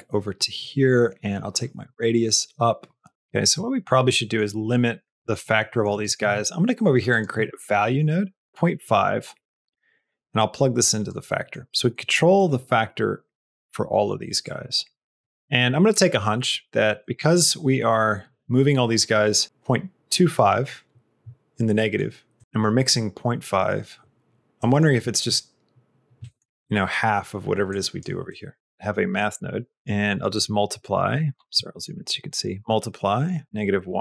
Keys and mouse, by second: 1.7-3.1 shift+drag, 3.5 middle click, 4.2 middle click, 5.0 middle click, 5.6 middle click, 5.8 click, 6.1 shift+a, 8.4 middle click, 8.5 click, 9.9-11.0 drag, 11.2 middle click, 12.3 click, 14.4 click, 15.3 middle click, 15.7 middle click, 16.1 middle click, 17.0 middle click, 21.8 middle click, 22.4 middle click, 24.6 middle click, 26.2 middle click, 27.6 click, 28.3 middle click, 28.7 shift+a, 30.2 click, 31.5 middle click, 32.2 click.